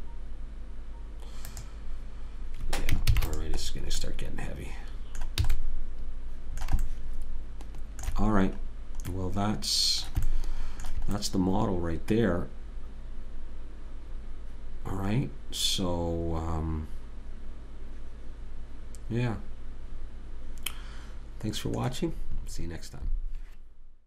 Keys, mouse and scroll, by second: 1.8 click, 3.5 ctrl+s, 4.0 middle click, 5.8 a, 9.1-10.7 middle drag, 12.7 middle click.